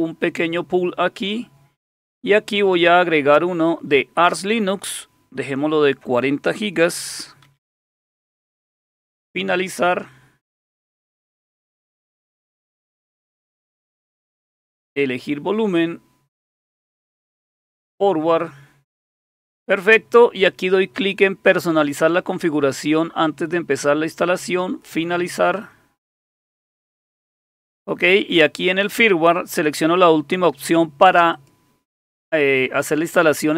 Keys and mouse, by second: 2.6 click, 5.4 click, 7.1-7.9 typing, 9.8 click, 14.7 click, 17.7 click, 21.6 click, 24.5 click, 28.7 click, 31.3 click.